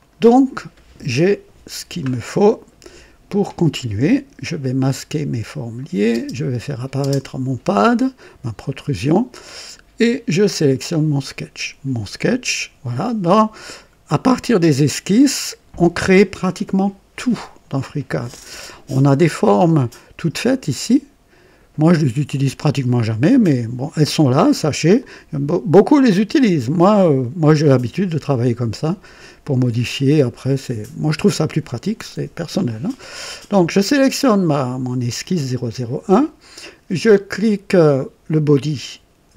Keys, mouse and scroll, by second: 4.4 click, 5.0 typing, 5.7 click, 6.1-7.0 typing, 6.5 click, 10.4 click, 20.7 click, 24.9 click.